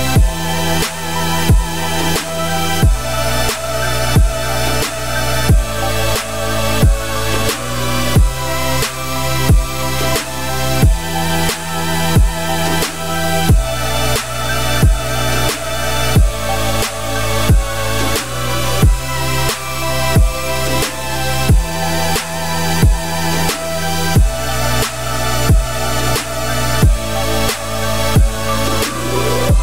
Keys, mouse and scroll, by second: 1.1-1.4 scroll down 4, 1.4 shift+middle click, 2.3 e, 5.7 click, 5.9 l, 6.9 shift+d, 7.6 r, 9.6 Tab, 10.0 z, 10.2 scroll down 2, 10.4-10.9 middle drag, 10.9-11.5 scroll up 2, 11.5 scroll up 1, 11.8 click, 12.3-13.9 middle drag, 13.9 click, 14.2 middle click, 14.5 Tab, 14.9 `, 15.4 z, 16.0 Tab, 16.4-16.9 middle drag, 16.9 z, 17.4-19.6 middle drag, 19.6-20.1 scroll down 3, 20.1-20.8 middle drag, 20.8-21.2 scroll down 5, 21.2 middle click, 21.4-22.7 scroll up 8, 21.7 Tab, 22.7 ctrl+r, 24.3 f, 27.4 ctrl+z, 28.0 Tab, 28.2 scroll down 5, 28.4 middle click, 29.2-29.6 scroll up 2.